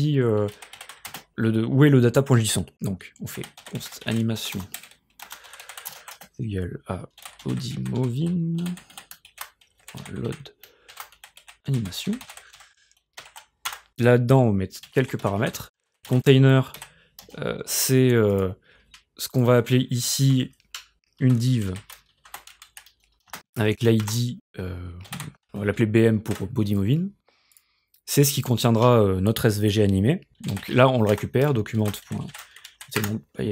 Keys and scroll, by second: 0.2-1.5 typing, 3.1-13.1 typing, 13.2 ctrl+alt+5, 13.7 Return, 14.6-16.8 typing, 20.2 Tab, 21.0-25.7 typing, 22.7 Left, 26.2 ctrl+s, 30.2-33.5 typing, 33.0 Return.